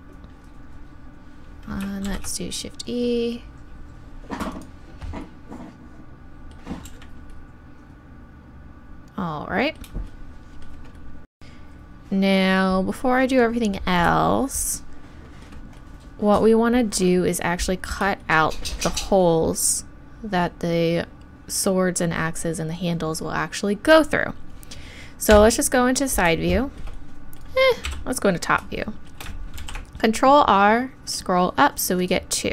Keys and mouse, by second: 2.1 shift+e, 4.6-6.9 drag, 6.9 z, 25.3 KP_3, 27.8 KP_7, 29.6 ctrl+r.